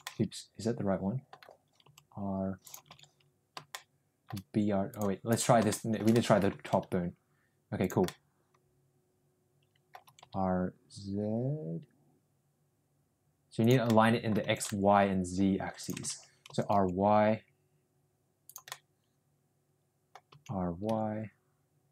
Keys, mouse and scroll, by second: 0.1 ctrl+z, 0.1-1.2 middle drag, 1.7 r, 3.1 ctrl+z, 3.6 shift+middle click, 4.9 click, 5.7 shift+middle click, 6.1 middle click, 6.5 r, 8.0-10.0 middle drag, 10.0 r, 13.8 middle click, 14.4 r, 16.3 ctrl+z, 16.4 r, 18.6-20.2 middle drag, 20.3 r.